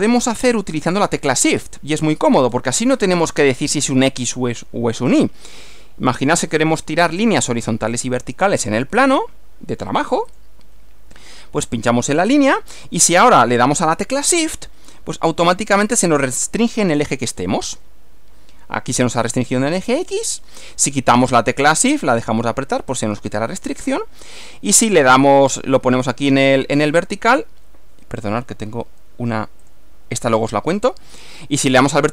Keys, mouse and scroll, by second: 2.0 shift+scroll down 2, 2.5 scroll up 2, 10.3 click, 12.4 click, 29.7 click.